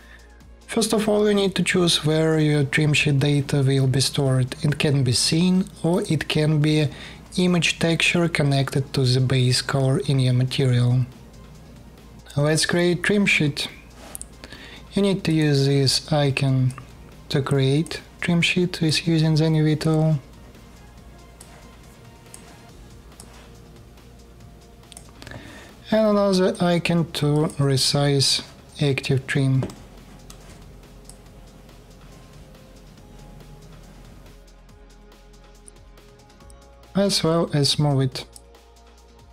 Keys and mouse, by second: 5.6 click, 5.7-12.2 middle drag, 12.2-15.2 drag, 15.2-25.2 middle drag, 24.6 click, 24.6 right click.